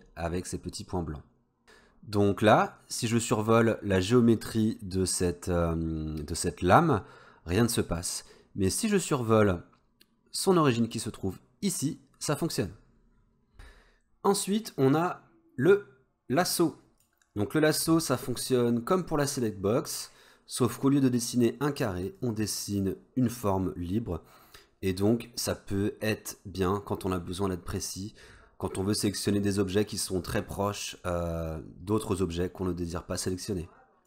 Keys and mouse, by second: 2.6-12.6 drag, 15.1-17.2 drag, 22.2-34.0 drag.